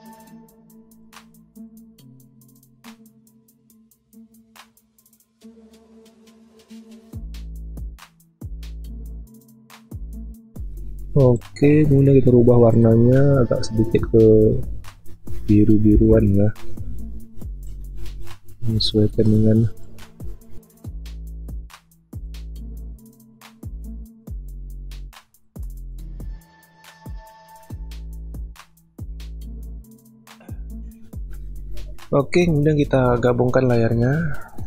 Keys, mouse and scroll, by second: 0.5 ctrl+alt+z, 9.4 typing, 10.3-10.7 alt+scroll down 1, 16.0 ctrl+b, 27.7-28.0 alt+scroll down 1, 28.7 alt+scroll down 1, 28.8-29.3 alt+scroll up 1.